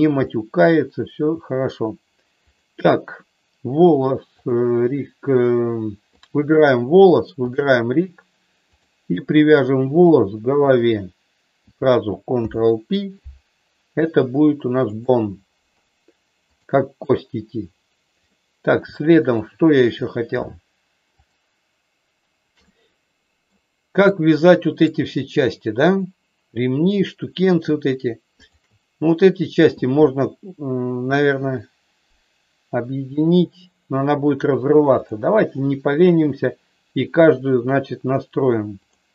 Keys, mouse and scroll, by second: 0.2 shift+middle click, 2.4 click, 4.4 click, 8.7 click, 12.4 ctrl+p, 16.6 click, 18.3 middle click, 19.0 shift+middle click, 21.1 click, 22.6 middle click, 24.0 shift+middle click, 28.3 shift+click, 38.8 click.